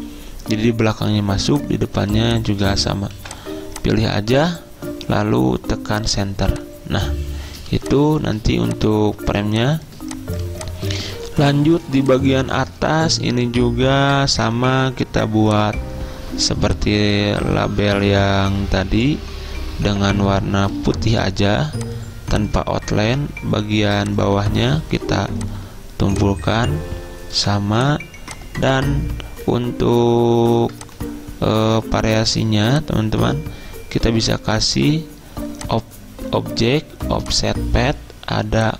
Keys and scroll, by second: 1.3 z, 3.2 v, 8.5 z, 11.3 z, 14.4 v, 19.6 s, 20.8 d, 23.3 a, 27.4 v.